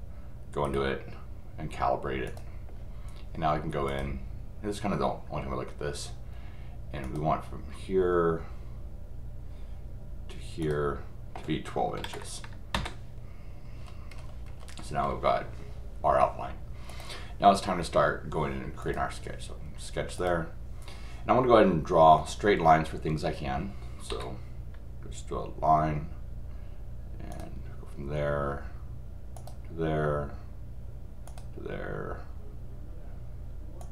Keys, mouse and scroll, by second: 0.6 right click, 2.2 click, 3.9 click, 7.0 click, 10.6 click, 13.7-14.6 scroll up 1, 15.0 scroll up 1, 16.9 click, 18.8 click, 20.2 click, 27.3 click, 29.3 click, 31.2 click, 33.8 click.